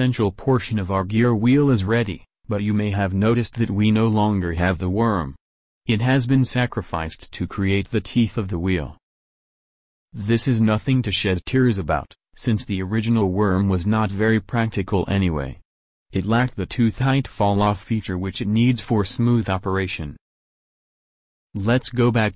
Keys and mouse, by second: 3.2-21.9 middle drag, 4.6 KP_1, 21.9 alt+Tab.